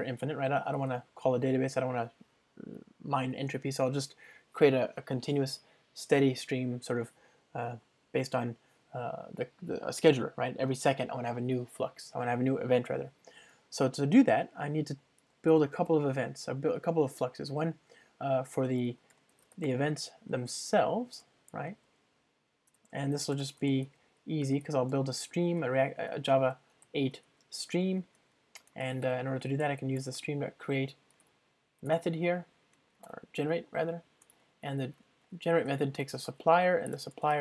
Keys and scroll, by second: 0.9 alt+Return, 1.3 super+1, 21.2 Return, 28.1 alt+BackSpace, 31.3 alt+Return, 34.3 Return.